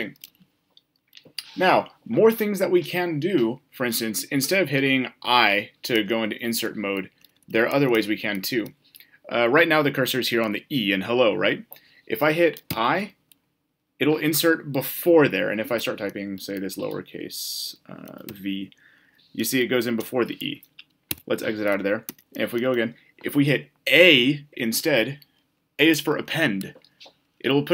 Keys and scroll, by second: 12.6 i, 21.0 Escape.